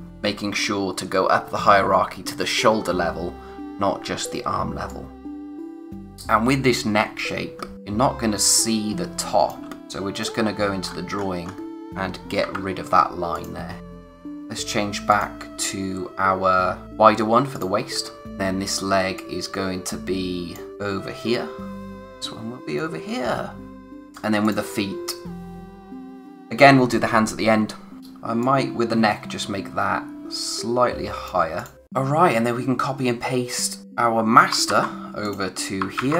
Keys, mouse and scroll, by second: 0.1 typing, 4.8 click, 7.6 scroll down 1, 7.7 space, 9.8-10.2 scroll up 1, 10.2 click, 10.9-11.7 scroll up 1, 11.7 click, 13.4 click, 15.9 click, 17.5 click, 17.8-18.2 scroll down 1, 18.2 typing, 19.2 click, 20.7 scroll down 1, 21.9 click, 26.3 space, 28.0 click, 33.8 click, 34.7 ctrl+c, 35.2 click.